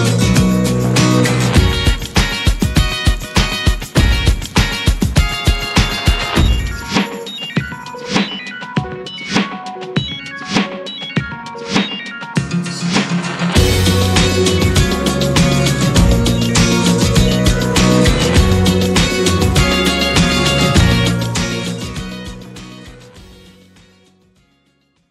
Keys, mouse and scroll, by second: 4.0 n, 7.8-19.3 drag, 19.4 scroll down 3, 19.6-25.1 shift+middle drag.